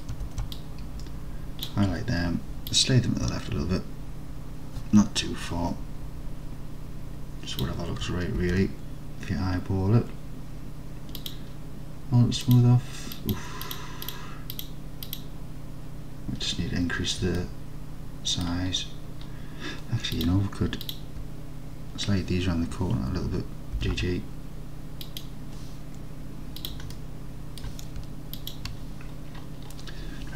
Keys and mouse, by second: 0.3 alt+z, 0.8 click, 2.8-7.7 drag, 8.5 alt+z, 11.3 click, 12.5 click, 13.2 click, 13.7 click, 14.1 click, 15.1 click, 17.5-18.5 alt+middle drag, 20.3 click, 20.9 ctrl+click, 23.9 g, 24.0 g, 25.1 click, 27.0 alt+click.